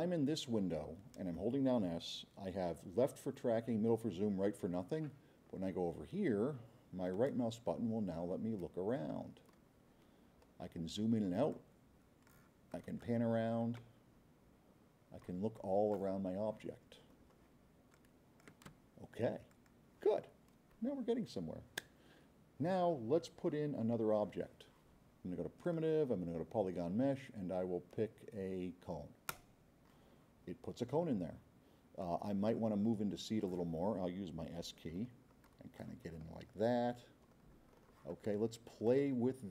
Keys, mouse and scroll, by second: 7.2-9.8 right drag, 10.4-10.7 scroll up 2, 10.7 middle click, 11.2 middle click, 11.5-12.4 drag, 12.7-13.1 drag, 13.4 scroll up 1, 13.9-15.3 right drag, 15.6-16.1 drag, 16.3 middle click, 17.2 middle click, 17.9-18.5 drag, 25.7 click, 29.3 click, 32.0-33.4 drag, 34.9-35.2 scroll up 4, 35.5-36.0 drag, 36.2-36.8 scroll up 2, 37.3-37.8 scroll up 4, 38.9-39.4 drag.